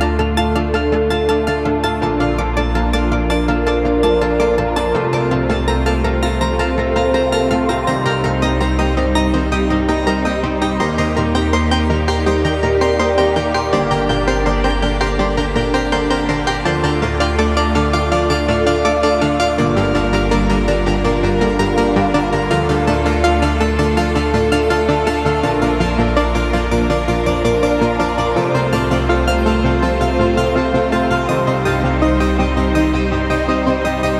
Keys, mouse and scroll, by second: 1.4 click, 2.3 space, 4.9 click, 7.7 Return, 9.1 click, 11.6 click, 12.3 ctrl+space, 12.6 ctrl+click, 12.7 ctrl+space, 13.1 ctrl+space, 13.8 click, 15.1 ctrl+a, 15.8 click, 16.8 ctrl+d, 17.5-25.1 drag, 25.1 right click, 26.6 click, 28.2 ctrl+z, 29.1 ctrl+shift+z, 30.6 v, 31.6 click, 32.6 shift+click, 33.6 right click.